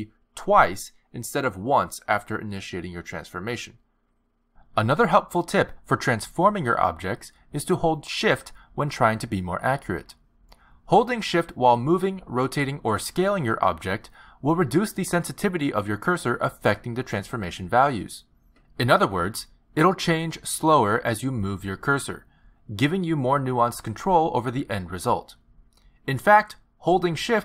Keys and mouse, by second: 0.5 s, 9.8 click, 10.3 click, 11.4 click, 21.2 ctrl+z, 23.4 click, 25.2 click.